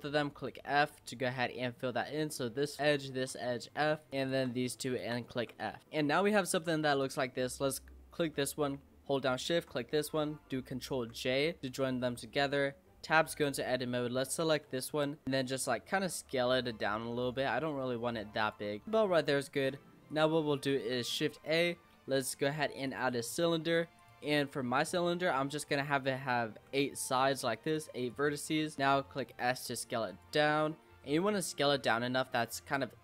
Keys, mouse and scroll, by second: 0.1 f, 0.4-2.2 middle drag, 2.2 click, 2.8 shift+click, 3.2 f, 4.0 click, 4.2 shift+click, 4.9 shift+click, 5.3 f, 5.8 middle click, 6.5 Tab, 6.7 scroll down 2, 7.0 click, 9.1 shift+click, 11.0 ctrl+j, 11.6 Tab, 12.5 click, 13.0 click, 14.5 l, 15.2 s, 18.7-20.1 middle drag, 20.1 click, 21.2 shift+a, 24.0 click, 24.7-27.7 drag, 28.0 click, 28.7 middle click, 28.8 s, 31.0 middle click, 31.4-31.9 scroll up 5, 31.9 s.